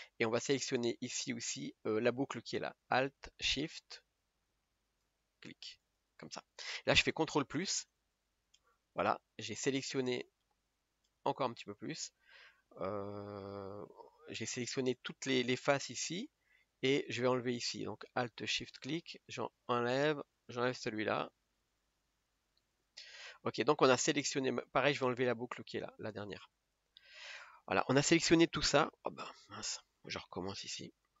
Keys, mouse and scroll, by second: 6.0 alt+shift+click, 8.0 ctrl+KP_Add, 8.6 ctrl+KP_Add, 12.3-12.9 scroll down 2, 12.9-14.1 middle drag, 14.1-14.5 scroll up 2, 14.5-18.8 middle drag, 18.8 alt+shift+click, 20.1 alt+shift+click, 23.3 middle click, 24.2 scroll up 1, 24.6-25.8 middle drag, 25.8 alt+shift+click, 26.5 scroll down 2, 26.9-29.1 middle drag, 29.1-29.8 scroll up 2, 29.8-31.2 middle drag.